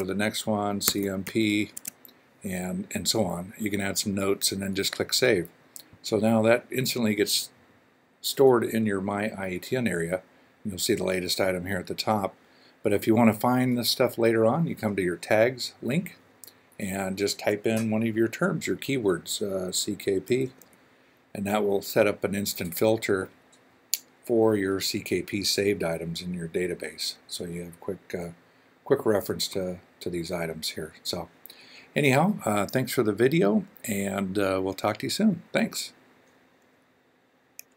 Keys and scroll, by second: 0.6-2.4 typing, 20.2-20.5 typing.